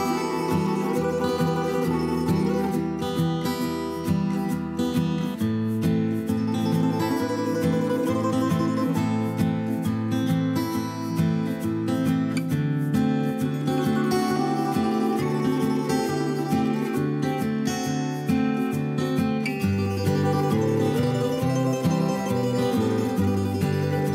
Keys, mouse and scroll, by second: 10.9-11.6 typing, 12.9 typing, 14.6 typing, 17.5 s.